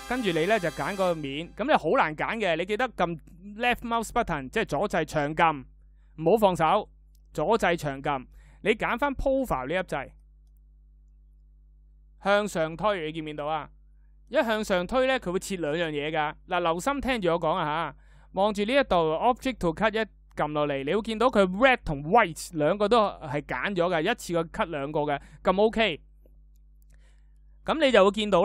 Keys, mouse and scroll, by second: 7.1-12.1 drag.